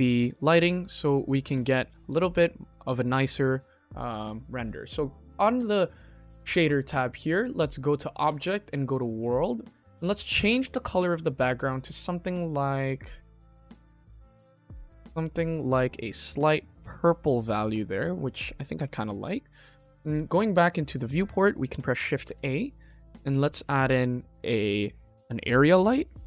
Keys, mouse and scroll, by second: 0.8-1.2 drag, 7.7-9.2 drag, 9.5 scroll up 2, 9.7 middle click, 10.4 middle click, 10.8 click, 17.0 click, 17.4-18.1 middle drag, 18.4 click, 19.6 click, 22.1 shift+a, 25.7 s.